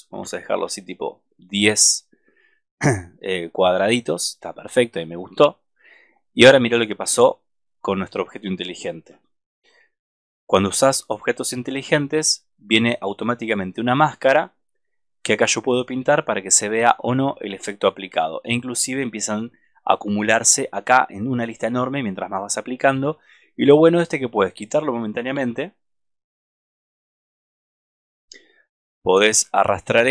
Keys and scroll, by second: 9.0 super+=, 25.4 super+-, 29.3 super+=.